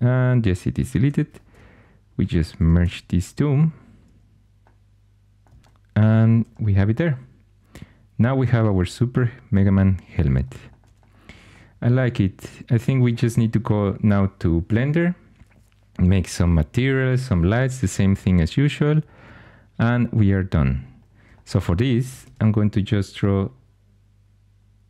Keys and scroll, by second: 1.0 4, 2.5 typing, 22.1 shift+a.